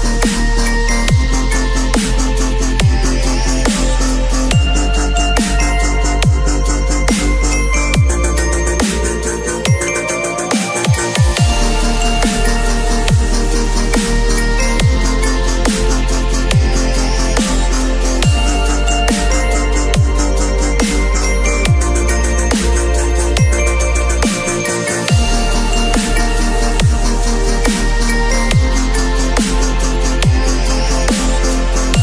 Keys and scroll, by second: 2.2 ctrl+a, 2.5 ctrl+c, 2.8 ctrl+w, 4.2 ctrl+v, 4.5 ctrl+t, 17.7 space, 19.4 ctrl+l, 25.2 Return, 28.1 b.